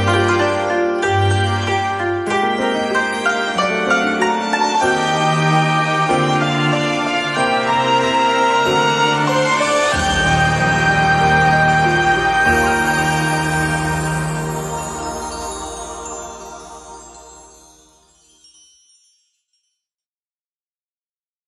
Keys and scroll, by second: 2.5 ctrl+g, 19.0 z.